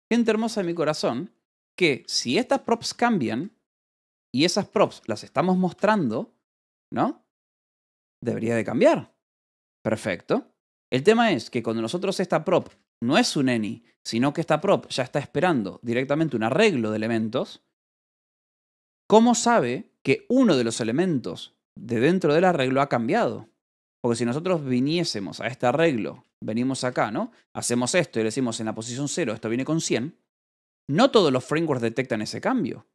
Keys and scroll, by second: 0.0-0.8 typing, 2.4-5.7 typing, 3.1 Escape, 7.9 Escape, 10.7 h, 12.4 l, 14.6 v, 14.9 c, 15.7 [, 16.2 Escape, 17.4 l, 18.6-19.4 typing, 23.5-26.8 typing, 28.0 0, 29.4 Escape, 30.6 j, 31.0 l, 31.9 h.